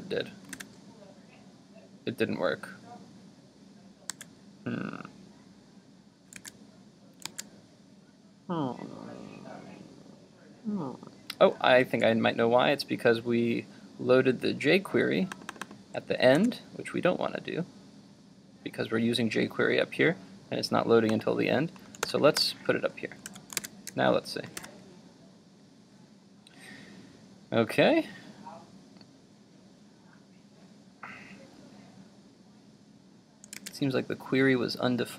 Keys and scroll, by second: 0.7 super+r, 4.1 super+Tab, 16.4 super+x, 22.0 super+v, 23.4 super+s, 23.7 super+Tab, 24.7 super+r, 33.6 super+Tab.